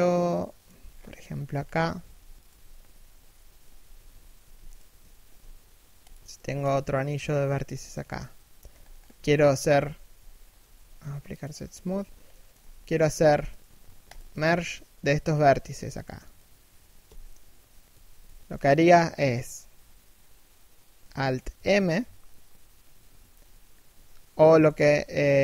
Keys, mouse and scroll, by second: 0.4 z, 0.5-1.0 scroll down 1, 1.0 middle click, 1.1 z, 1.2-1.6 scroll up 1, 1.6 z, 2.0 right click, 3.2 KP_3, 3.5 KP_1, 4.0 a, 4.3 alt+right click, 4.8 shift+d, 6.0 e, 7.6 middle click, 8.3-10.2 typing, 8.4-8.7 scroll up 1, 9.0 middle click, 11.9 middle click, 13.1 right click, 13.7 shift+right click, 16.6 f, 21.1 alt+m, 24.2 ctrl+f.